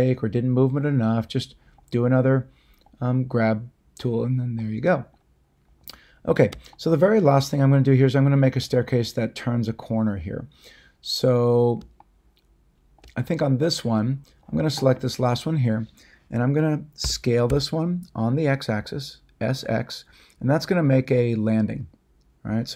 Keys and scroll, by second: 17.0 s, 17.4 x.